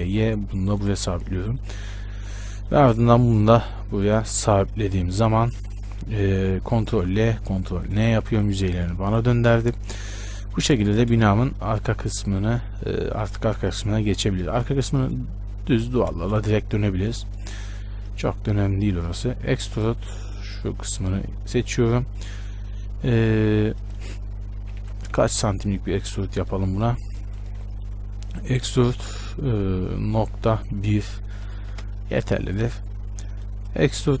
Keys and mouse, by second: 0.0 g, 1.2 z, 4.6 Tab, 5.9 Tab, 7.2 ctrl+l, 8.2 ctrl+n, 9.2 Tab, 9.6 a, 11.1 shift+space, 15.8 Tab, 16.4 shift+space, 19.1 e, 20.6-24.8 right drag, 24.8 ctrl+z, 25.0 ctrl+z, 28.2-31.7 right drag, 28.4 e, 32.9-34.2 right drag.